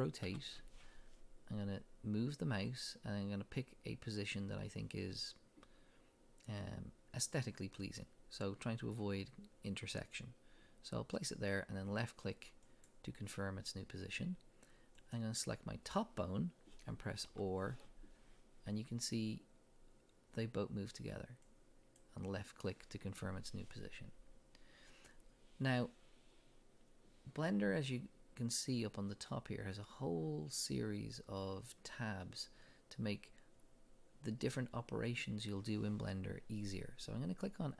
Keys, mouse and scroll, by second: 0.3 r, 9.6-12.8 drag, 15.0 click, 17.2 r, 22.0 click.